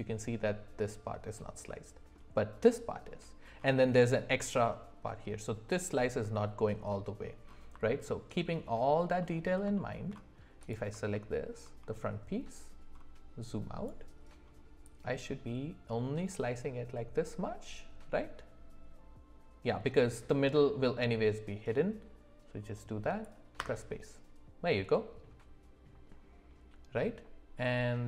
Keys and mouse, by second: 8.1 alt+middle click, 9.2 alt+middle click, 9.8 shift+middle click, 10.6 click, 11.1 shift+middle click, 14.9-23.8 drag.